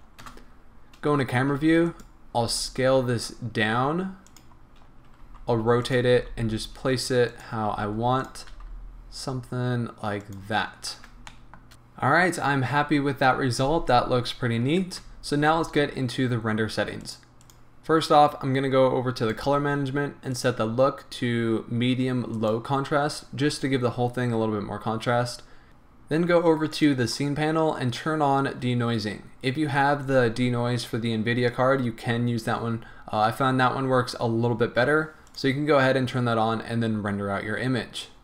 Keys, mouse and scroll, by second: 0.2 KP_0, 1.3 g, 2.0 click, 2.5 s, 4.5 click, 4.9 scroll down 1, 5.3 r, 6.0 click, 6.2 g, 7.5 click, 7.8 r, 8.3 click, 8.6 g, 10.4 click, 10.7 scroll up 1, 11.3-11.7 shift+middle drag, 15.0 z, 17.0 click, 17.4 click, 19.2 drag, 20.3-25.7 drag, 25.1-25.7 scroll down 2, 26.7 click, 35.2 click.